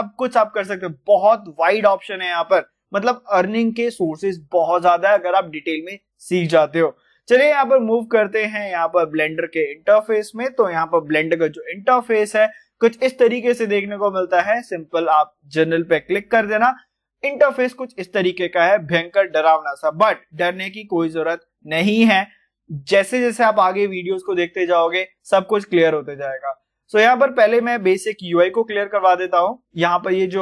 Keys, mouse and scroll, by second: 0.0-0.7 scroll down 1, 1.1-2.1 scroll down 1, 2.4 scroll up 1, 8.8 click.